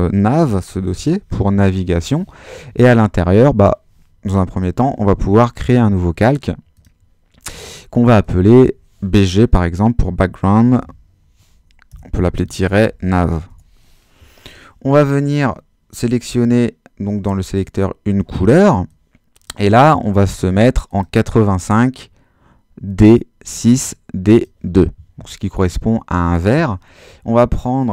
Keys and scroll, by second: 0.0-1.8 typing, 9.5-13.9 typing.